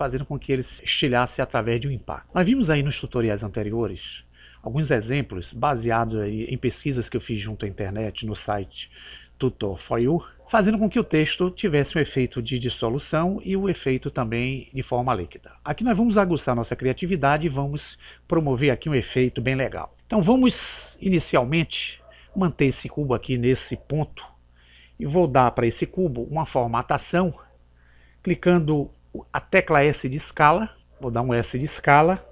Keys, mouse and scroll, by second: 30.8-31.8 right drag, 30.8 s.